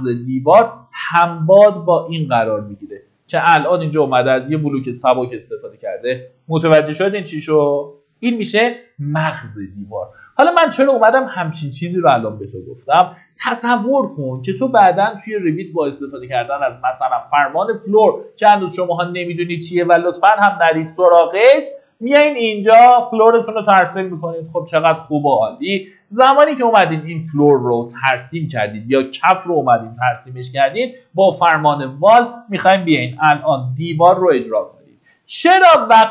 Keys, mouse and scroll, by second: 20.0 middle click, 20.4-21.0 scroll down 1, 21.0 middle click, 21.8 click, 24.1 Escape, 25.0 click, 30.6 typing.